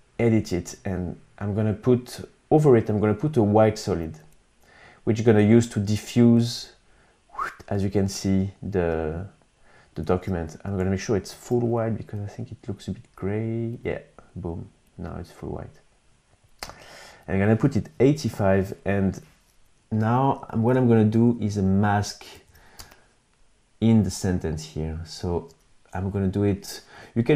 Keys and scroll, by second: 5.2 t, 9.4 super+z, 10.6 shift+super+y, 17.3 8, 17.6 Home, 20.0 super+=, 21.7 super+=, 22.1 space.